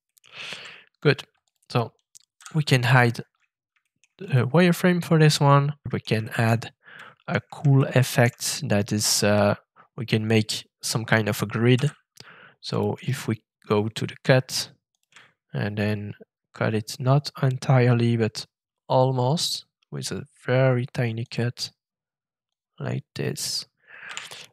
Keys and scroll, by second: 0.5 shift+<, 2.3 f, 11.7 f, 24.0 a.